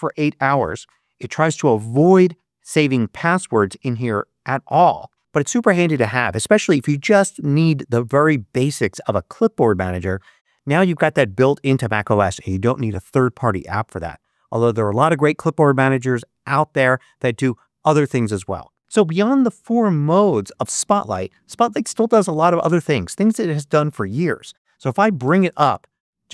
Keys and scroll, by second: 25.1 super+space.